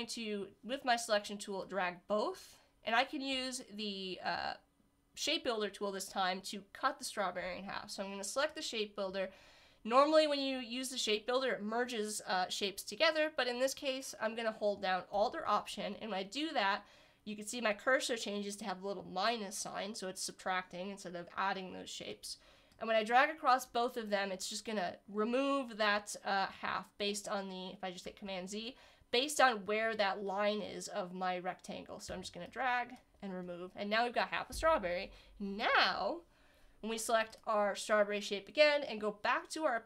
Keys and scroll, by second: 28.3 super+z.